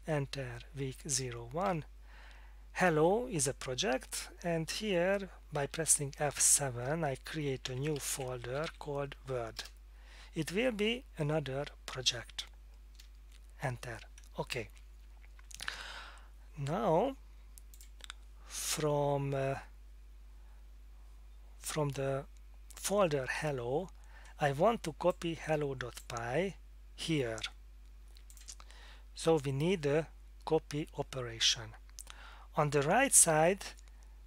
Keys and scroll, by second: 1.1 Return, 1.7 Down, 6.2 F7, 7.4-9.2 typing, 9.6 Return, 13.0 Return.